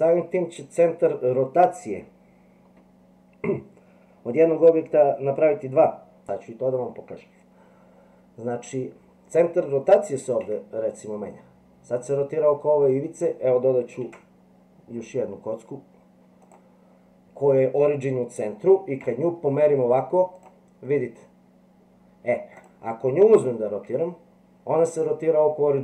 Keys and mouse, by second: 10.4 r, 14.0 shift+a, 19.1 g, 22.6 click, 23.9 r.